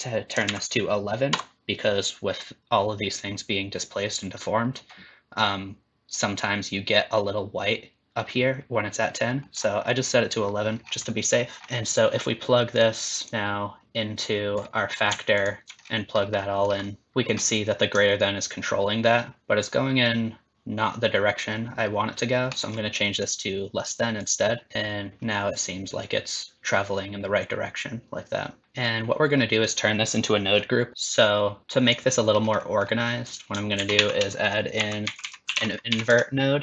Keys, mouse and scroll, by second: 0.5 KP_1, 5.4 middle click, 9.4 middle click, 10.8-11.1 scroll down 3, 11.1 middle click, 11.6 click, 11.6 scroll down 3, 11.7 middle click, 12.7 click, 13.3 click, 15.4 ctrl+shift+click, 15.8-16.4 scroll up 7, 16.4 middle click, 16.8 middle click, 17.1 middle click, 17.1 scroll down 2, 18.2 shift+click, 23.1 click, 24.7 shift+click, 30.9 middle click, 30.9 click, 30.9 scroll down 4, 31.6 click, 32.3 scroll up 3, 32.6 middle click, 33.2 click, 33.8 shift+a.